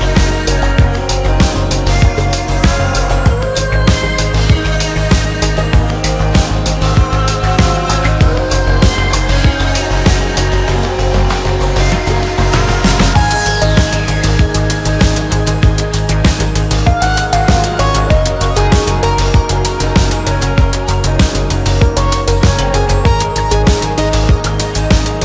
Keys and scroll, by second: 8.2 b, 9.0 space, 9.1 Escape, 13.8 ctrl+shift+a, 15.2 b, 15.7 space, 15.8 Escape.